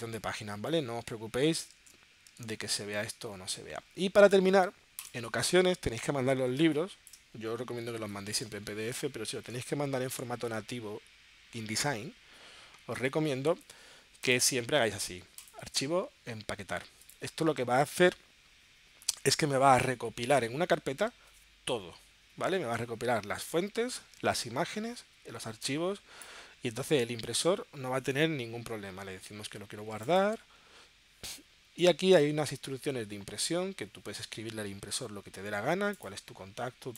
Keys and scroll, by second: 3.4 super+q, 6.7 space, 8.0 space.